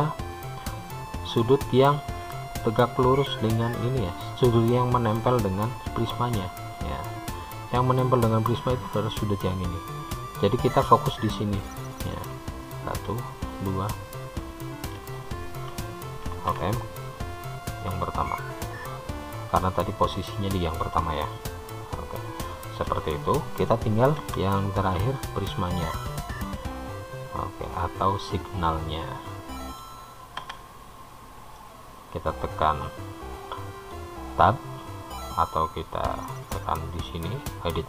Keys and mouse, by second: 7.0 click, 9.4 click, 13.0 shift+click, 16.7 alt+m, 22.9-24.2 middle drag, 24.5 Tab, 25.4 click, 26.6-30.3 middle drag, 30.8 Tab, 31.9-34.2 middle drag, 36.1-37.8 drag.